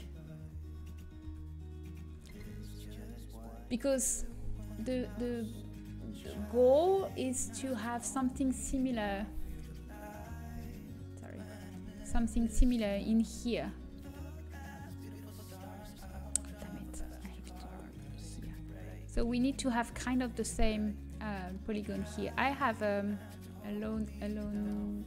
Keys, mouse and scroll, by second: 0.0-1.8 drag, 1.2 Tab, 1.8 middle click, 2.2 Tab, 3.0-5.4 drag, 8.5 click, 9.0 Tab, 10.4 click, 10.5 Tab, 11.8 Tab, 12.8-13.9 middle drag, 15.5 click, 15.5 right click, 15.7 Tab, 18.3 Tab, 18.9-25.0 middle drag.